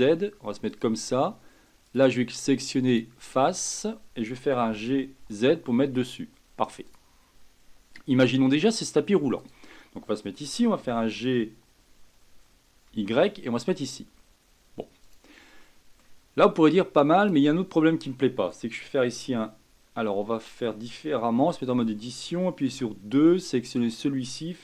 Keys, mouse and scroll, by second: 1.8-4.7 drag, 4.7 g, 7.2-7.6 scroll down 2, 7.6-8.3 scroll up 1, 8.3 scroll up 2, 8.4-9.4 scroll down 1, 9.4 click, 10.8 g, 15.6-16.2 middle drag, 16.2-17.2 scroll down 2, 17.2 click, 20.2-21.4 middle drag, 21.4 Tab, 22.6 2, 23.6 click.